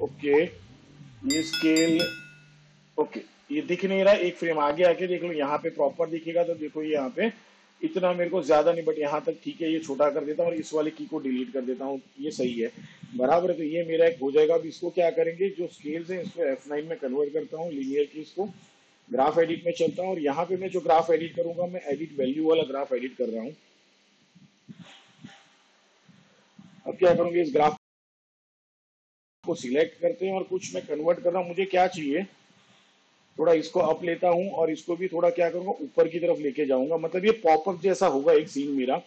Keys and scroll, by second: 5.5 ctrl+Left, 12.5 Delete, 18.1 F9.